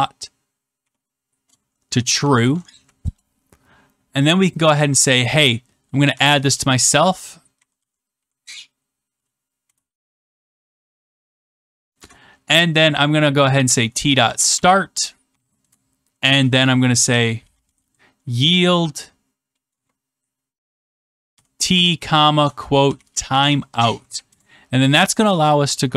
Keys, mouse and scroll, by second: 0.0-2.7 typing, 3.0 Return, 5.8-11.9 typing, 13.3-15.8 typing, 16.8-24.1 typing, 24.2 Return.